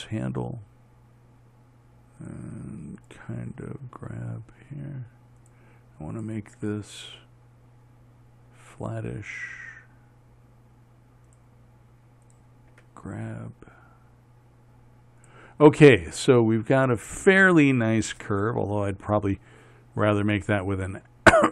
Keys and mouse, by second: 0.1 g, 3.6-5.9 drag, 3.9 g, 6.6 click, 7.0 g, 12.7-15.7 drag, 13.2 g.